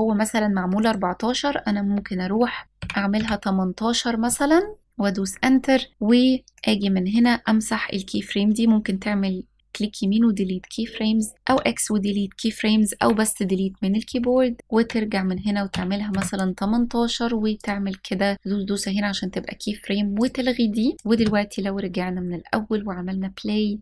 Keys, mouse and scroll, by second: 0.4-4.8 drag, 6.4 click, 6.5-10.4 right drag, 12.7 Delete, 14.6-17.3 drag, 19.8 click, 20.9 click, 20.9 space.